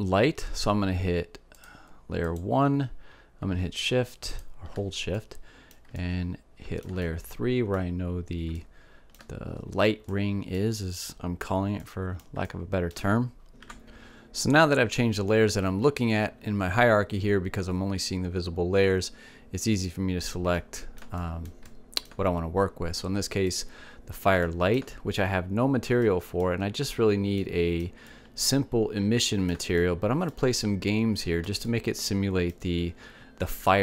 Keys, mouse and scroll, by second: 3.0-5.5 drag, 5.7 click, 6.6 middle click, 7.0 click, 7.6-10.8 middle drag, 21.6-24.5 middle drag, 25.1-27.1 drag, 25.3-29.1 middle drag, 31.8-33.8 middle drag.